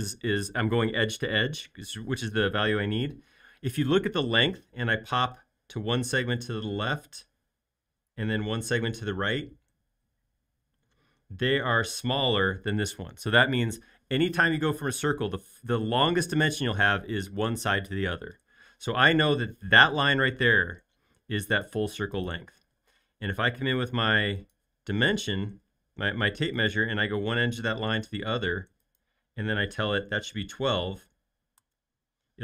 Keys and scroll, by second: 20.4 space, 29.9-30.7 typing, 31.6 Return.